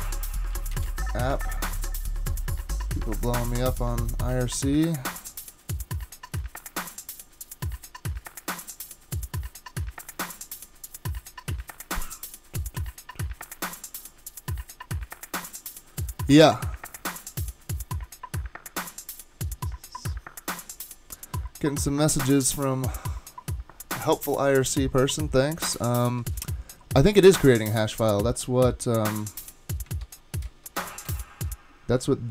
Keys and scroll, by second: 0.7 typing, 25.9 typing, 30.0 super+Tab.